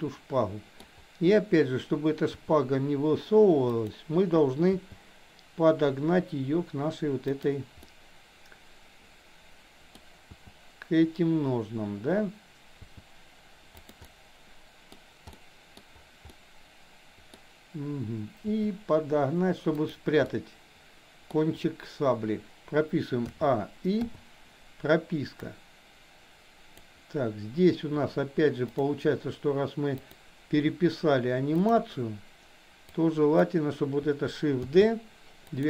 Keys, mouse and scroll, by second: 2.2 r, 4.7 g, 7.8 scroll up 1, 7.9-9.9 middle drag, 9.9 scroll down 1, 10.3 f, 12.7 g, 14.1-14.9 middle drag, 15.3-15.8 middle drag, 16.3-17.3 middle drag, 17.3 scroll down 1, 18.4 r, 20.2-21.3 middle drag, 23.2 a, 24.1 i, 25.4-26.9 drag, 29.9 click, 31.6 shift+click, 32.9 click, 34.7 shift+d.